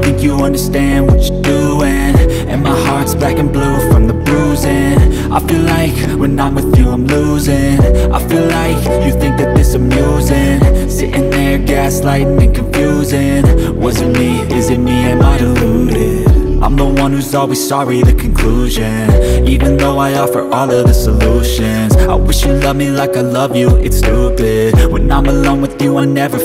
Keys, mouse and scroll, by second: 5.4 click, 6.6 Left, 12.6 Right, 16.6 ctrl+click.